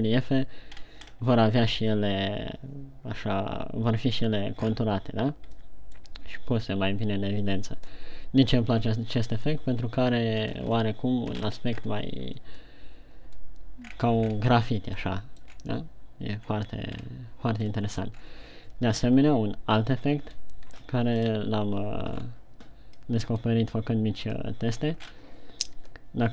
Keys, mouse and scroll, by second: 6.2 middle click, 6.2 scroll down 4.